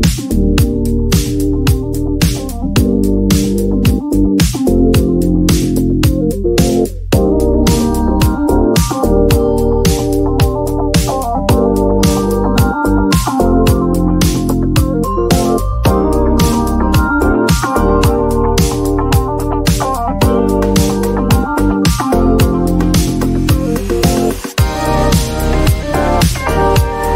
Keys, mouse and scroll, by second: 5.1 click, 6.6 click, 8.9 click, 11.0 click.